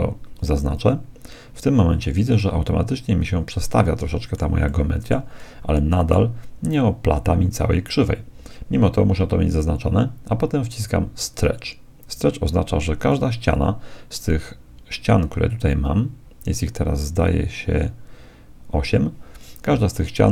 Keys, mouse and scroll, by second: 0.7-2.5 drag, 2.5-4.3 middle drag, 4.7-7.3 middle drag, 11.3-14.7 drag.